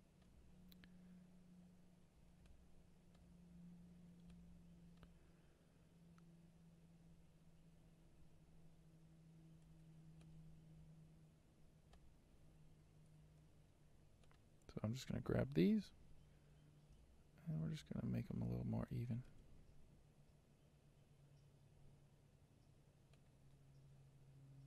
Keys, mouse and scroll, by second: 0.8 Tab, 2.6-3.6 shift+middle drag, 3.6-4.4 scroll up 6, 4.4-5.9 shift+middle drag, 5.9-7.8 scroll down 2, 7.8-9.2 scroll down 1, 9.2-9.6 scroll down 1, 9.6 alt+a, 10.2-12.7 drag, 12.7 n, 13.2 t, 14.3-15.7 drag, 17.0-17.9 scroll up 6, 17.9-19.1 shift+middle drag, 19.1 g.